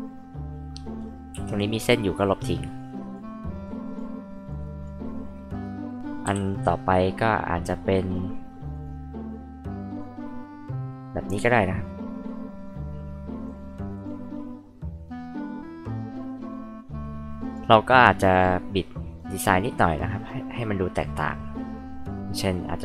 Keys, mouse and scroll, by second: 1.3 e, 1.7 click, 2.8 click, 3.6 click, 4.5 click, 8.7 click, 9.8 click, 13.4 click, 13.9 click, 17.4 click, 19.1 click, 20.2 click, 22.6 click.